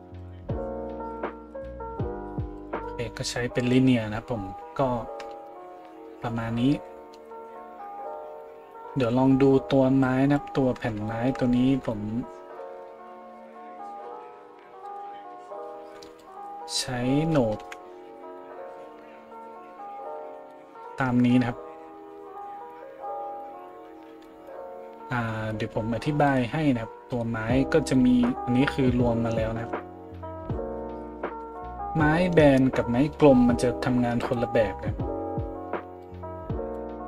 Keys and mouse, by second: 14.9 middle click, 14.9 right click, 17.6 KP_Decimal, 26.3 middle click, 26.3 right click, 27.1 middle click, 27.1 right click, 34.2 right click.